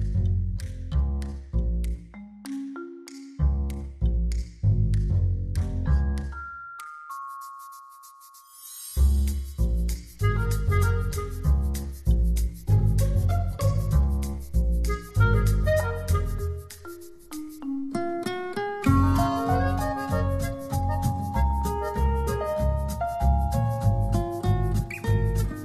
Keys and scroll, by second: 24.7 v.